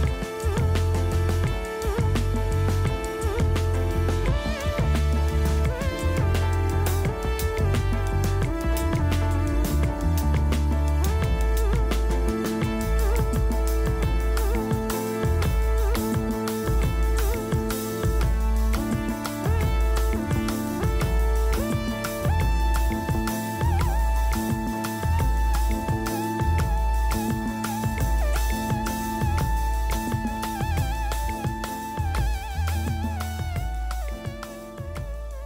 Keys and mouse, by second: 0.3 click, 0.5 click, 3.0 ctrl+s, 3.7 l, 5.9-8.0 typing, 10.5 middle click, 11.8 ;, 12.0 l, 12.9 a, 13.6 ctrl+s, 15.8 l, 15.8 z, 16.9 middle click, 18.0 middle click, 18.3 l, 18.3 KP_1, 18.4 z, 20.5 click, 20.6 z, 21.7-23.2 middle drag, 23.7 middle click, 24.9-27.4 middle drag, 29.2 l, 29.3 KP_1, 29.7 click, 30.5 z, 30.9 click, 31.2 click, 31.3 z, 32.5-33.6 middle drag, 33.7-35.4 typing.